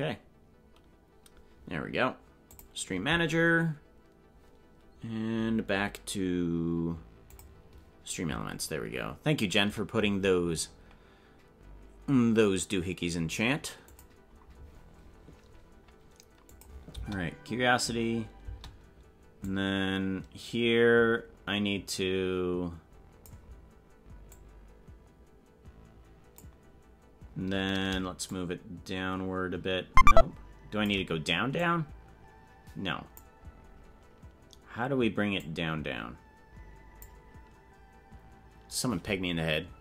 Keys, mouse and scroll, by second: 16.6 click, 17.0 space, 18.6 space, 19.5-23.4 drag, 24.2-26.5 drag, 28.3-31.1 shift+drag, 31.6-33.3 drag, 35.3-37.2 drag.